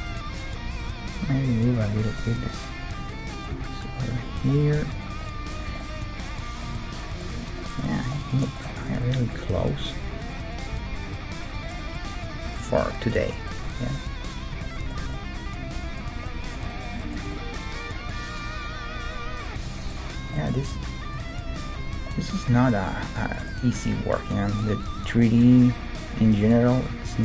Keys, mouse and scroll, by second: 0.7 g, 2.7 middle click, 2.9-4.9 right drag, 3.5 g, 4.9 middle click, 5.0-6.7 right drag, 5.7 Tab, 6.7-7.9 middle drag, 7.4 Tab, 7.9-9.6 right drag, 9.6 g, 10.7 g, 10.8-11.8 right drag, 12.5-13.7 middle drag, 12.5 g, 13.7-15.4 right drag, 14.1 g, 15.0 Tab, 15.4 middle click, 20.7 Tab, 21.2-22.9 right drag, 22.0-26.3 middle drag, 23.8-25.9 right drag, 24.8 g.